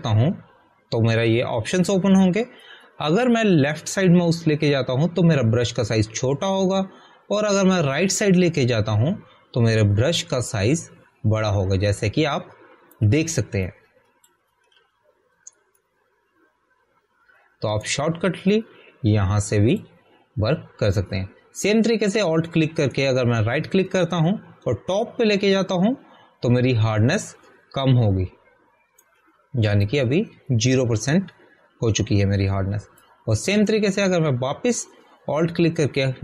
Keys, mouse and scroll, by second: 0.1 Delete, 1.0 alt+right click, 15.6 click, 17.7 alt+right click, 20.5 click, 24.0 Left, 24.8 alt+right click, 31.8 click, 34.9 alt+r, 35.0 alt+right click.